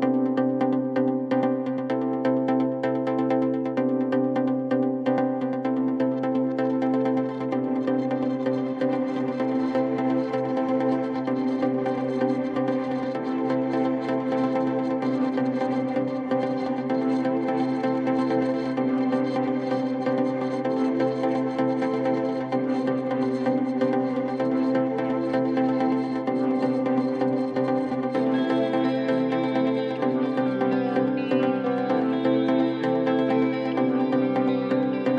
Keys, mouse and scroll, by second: 0.9 click, 2.6-3.6 typing, 4.2 Return, 5.6 click, 6.8 click, 8.6-9.5 typing, 10.8 click, 11.0 click, 14.1 click, 15.2 click, 17.4 right click, 19.8 click, 22.7 click, 24.1-24.8 typing, 28.1 click, 30.3 click, 31.4 click.